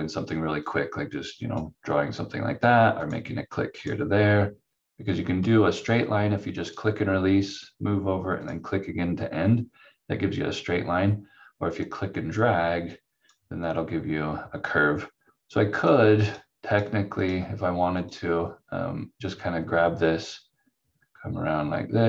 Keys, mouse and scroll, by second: 0.6 click, 11.8 click.